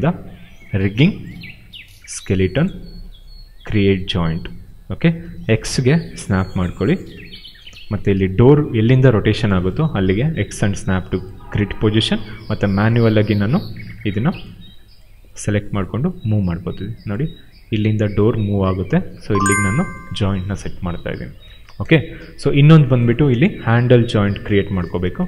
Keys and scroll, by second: 5.6 x, 7.1 space, 10.4 x, 13.2 ctrl+z, 13.6 w, 21.4 space, 25.0 space.